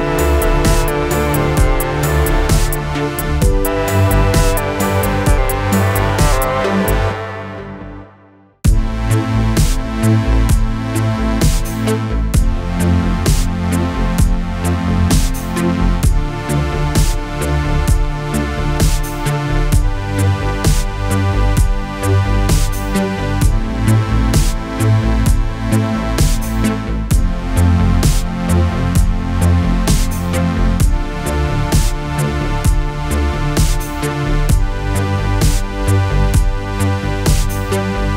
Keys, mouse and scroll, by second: 2.8 ctrl+d, 3.4 click, 5.0-5.5 click, 9.3 click, 13.6 ctrl+d, 14.9 click, 16.4-17.4 click, 18.0 click, 19.4-20.9 click, 29.4 click, 30.9 click, 33.0 ctrl+d, 33.8-35.8 click.